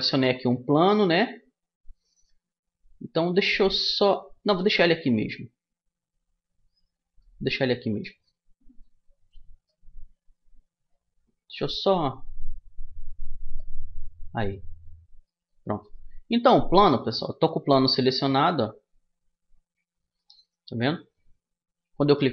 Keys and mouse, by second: 0.0 click, 0.5-3.0 middle drag, 4.3-6.1 middle drag, 7.6-9.3 right drag, 8.5 click, 9.3-10.3 middle drag, 11.2-12.8 right drag, 11.9 click, 12.8 middle click, 13.0 click, 13.2 middle click, 15.2 middle click, 15.5-17.3 right drag, 17.7 Tab, 18.9 Tab, 19.9-21.7 right drag, 21.8-22.3 right drag.